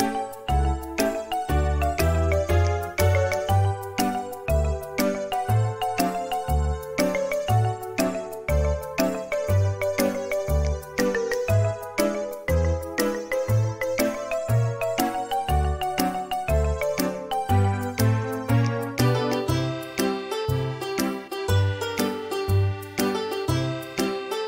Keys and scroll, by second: 0.2 space, 14.4 space, 20.5 c, 20.5 z.